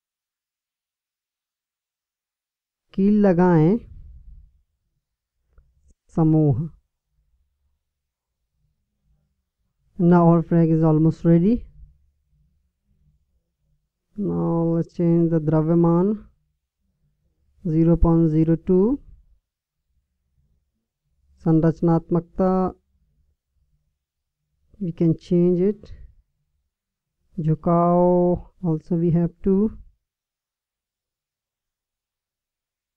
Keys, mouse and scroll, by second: 0.1-2.0 drag, 5.4-8.7 drag, 32.2-32.9 drag.